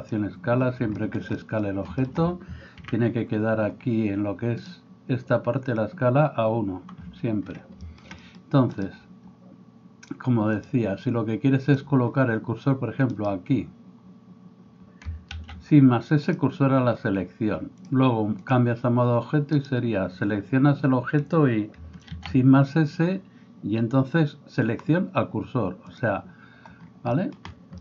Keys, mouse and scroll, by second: 2.9 n, 4.6-5.8 drag, 5.8-10.5 middle drag, 10.5-27.8 drag, 15.4 shift+s, 19.6-21.8 middle drag, 19.6-21.8 right drag, 22.1 shift+s.